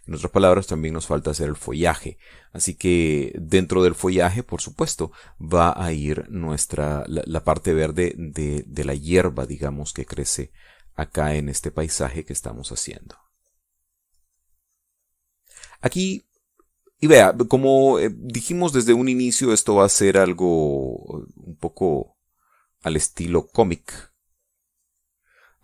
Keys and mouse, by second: 2.4-5.0 drag, 6.4-10.8 drag, 11.1-14.8 drag, 16.6-17.9 drag, 18.6-25.6 drag.